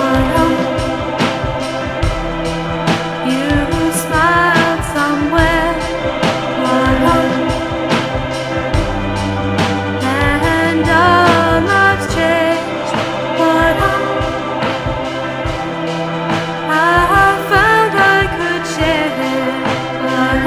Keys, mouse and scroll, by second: 2.6 F9, 5.5 KP_1, 6.6 KP_2, 7.9 KP_3, 10.4 KP_5, 13.7 n, 19.9 ctrl+a.